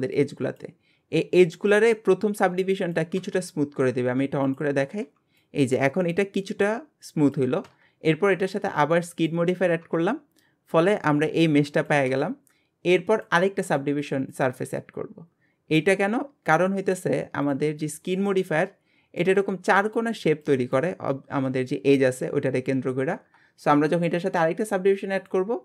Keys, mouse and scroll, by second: 4.5 click, 9.1 click, 13.2-14.3 drag, 16.0-17.4 drag, 17.5 click, 17.9-18.3 scroll up 3, 18.3-23.1 middle drag, 25.2 click.